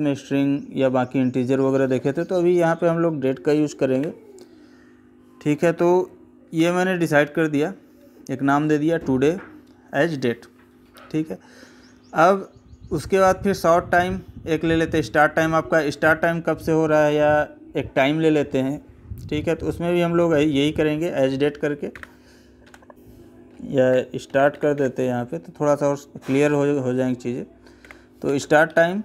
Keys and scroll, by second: 3.8 Tab, 22.9 Left, 28.5 Right.